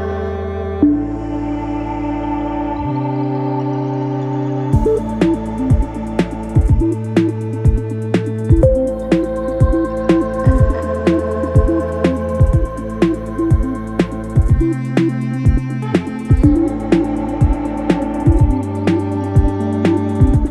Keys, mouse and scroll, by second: 5.0-12.4 drag, 17.2 click.